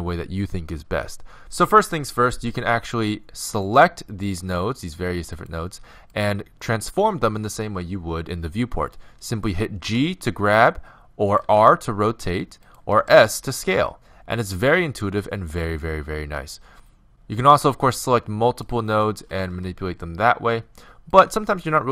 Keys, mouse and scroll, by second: 3.7-7.9 right drag, 9.9 g, 11.6 r, 13.0 s, 17.8-20.7 right drag, 19.6 g.